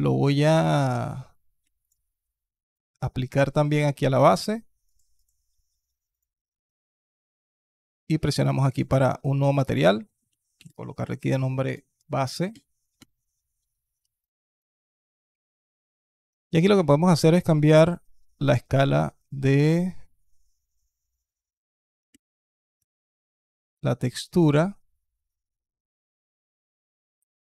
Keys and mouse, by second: 1.6 shift+click, 2.5 click, 4.2 click, 4.9-6.0 drag, 8.6 click, 9.8 click, 10.6-11.8 drag, 11.8 BackSpace, 15.8 middle click, 16.1 middle click, 19.5-22.6 drag, 23.9-26.8 alt+drag.